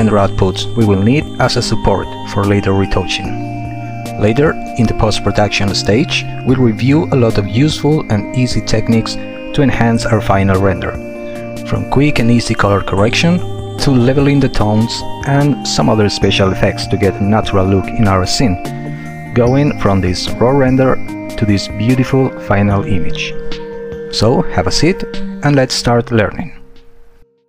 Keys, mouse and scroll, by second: 3.7 space.